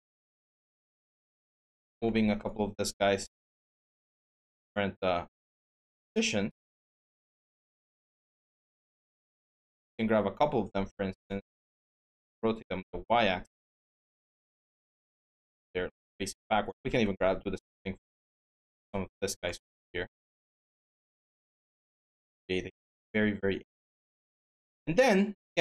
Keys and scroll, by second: 8.2 ctrl+z, 13.9-14.7 typing, 16.6 q, 19.2-19.9 typing.